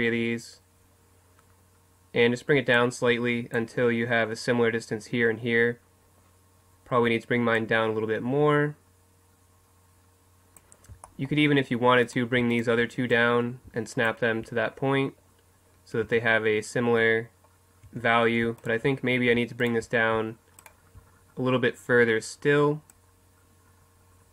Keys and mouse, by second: 2.8-6.0 drag, 7.6-10.6 drag, 12.1 right click, 12.8-15.5 drag, 13.1-14.7 right drag, 15.5 middle click, 16.0 Tab, 17.9 Tab, 18.6-21.2 right drag, 23.0-24.3 drag.